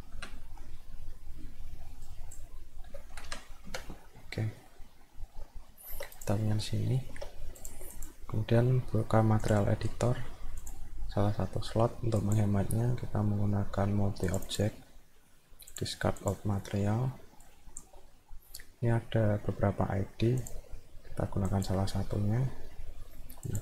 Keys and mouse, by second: 2.1 click, 4.6 middle click, 5.7 alt+middle click, 6.1 click, 7.0 alt+middle click, 7.6 click, 7.9 click, 9.4 click, 10.6 click, 12.2 click, 14.3 click, 14.5 click, 15.7 click, 16.2 click, 17.5 click, 20.4 click, 21.5 click, 23.5 click.